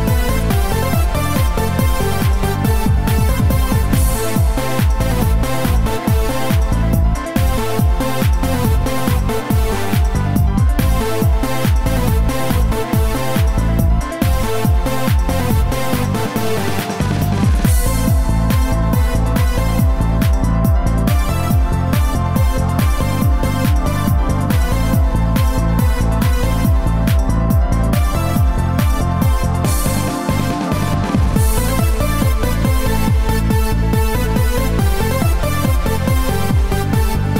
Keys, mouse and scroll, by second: 4.9 click, 5.9 click, 6.8 click, 20.1 click, 21.8 click, 33.0 click, 35.8 KP_1.